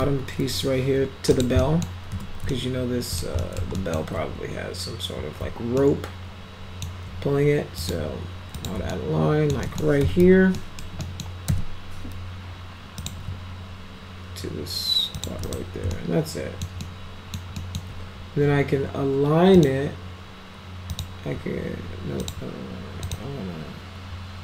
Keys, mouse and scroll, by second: 0.5 x, 1.3 click, 1.6 middle drag, 2.1 z, 2.5 alt+middle click, 3.4 middle click, 3.7 alt+middle click, 5.8-6.8 alt+middle drag, 7.8 click, 8.6 click, 8.9 alt+middle click, 9.7 middle click, 9.8-10.7 typing, 10.6 middle click, 11.0 middle click, 11.5 F3, 13.0 click, 15.2 shift+click, 15.5 right click, 15.9 alt+middle click, 16.8 alt+middle click, 17.6 alt+middle click, 19.5 click, 20.9 click, 22.2 click, 23.1 click.